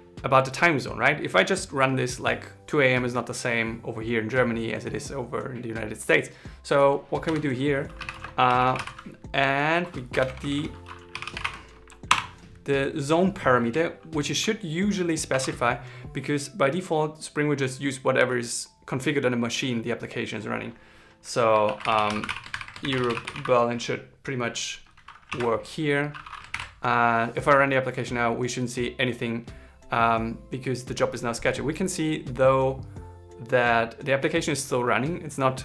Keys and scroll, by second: 15.0 shift+2, 21.4 shift+e, 22.2 shift+7, 22.5 shift+b, 26.0 super+s, 26.2 ctrl+shift+r.